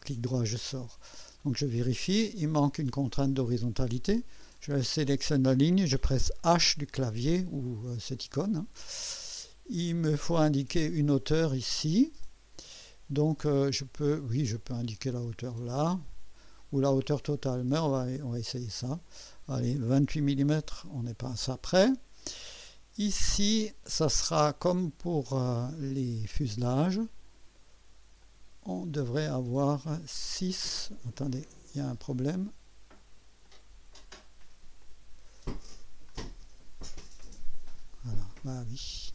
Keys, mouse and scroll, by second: 0.0 right click, 1.0 scroll up 2, 1.4 right click, 2.3 right click, 4.6 click, 6.4 h, 8.7-9.2 scroll down 2, 9.4 right click, 12.2 click, 14.5 click, 18.1 click, 20.0 KP_2, 20.4 KP_8, 20.6 Return, 25.0 click, 28.2 click, 30.1 click, 31.3 click, 31.8 click, 33.4 click, 34.8 click, 36.1 click, 37.5 click, 38.1 click, 38.5 scroll down 2, 39.0 scroll up 2.